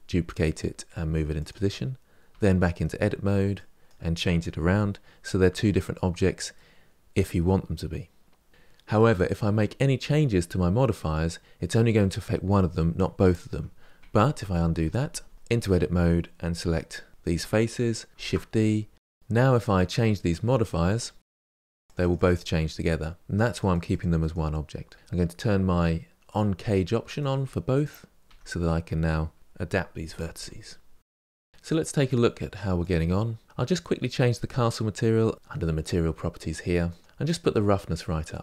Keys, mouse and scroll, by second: 2.1 Tab, 2.7 middle click, 3.4 click, 4.5 g, 6.4-8.5 middle drag, 14.1 ctrl+z, 14.4 ctrl+z, 14.7 ctrl+z, 14.9 ctrl+z, 15.3 Tab, 15.5-16.5 middle drag, 16.5 3, 17.2 click, 18.1 shift+d, 20.3-21.7 middle drag, 21.7 click, 23.3-24.7 drag, 24.9-26.2 middle drag, 26.2 click, 27.0 click, 27.6 middle click, 28.3 Tab, 28.4 Tab, 28.5 1, 28.9 g, 29.1 click, 29.7 g, 30.4 click, 30.4 g, 31.1 scroll down 4, 31.3 middle click, 31.4 Tab, 33.2 click, 37.0-38.4 drag.